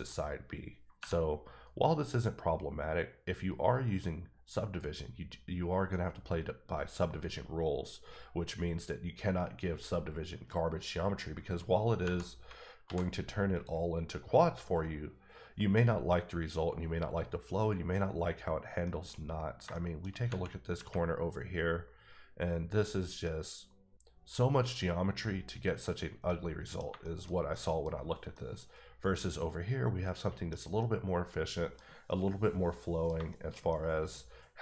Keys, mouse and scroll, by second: 3.8-5.0 scroll down 7, 12.0 Tab, 12.8 alt+v, 13.5 click, 18.8 middle click, 19.2 scroll up 3, 19.7 shift+middle click, 20.8 Tab, 22.9 scroll down 1, 23.8-25.5 scroll up 2, 25.5-26.2 scroll down 1, 26.2 middle click, 26.8 shift+middle click, 27.2 shift+scroll down 2, 27.5 middle click, 28.3 middle click, 30.5 scroll down 1, 30.8 middle click, 31.8 scroll down 1, 32.0 middle click, 34.0 middle click.